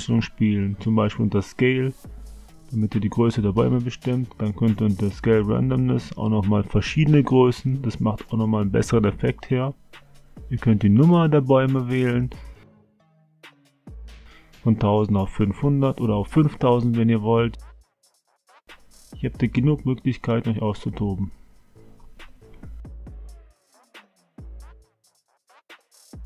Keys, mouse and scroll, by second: 0.9 click, 5.1-6.9 drag, 7.8-11.6 drag, 13.4 click, 15.0-16.8 drag, 17.0-20.4 drag, 19.4 KP_0, 21.6-24.3 drag, 22.8 KP_0.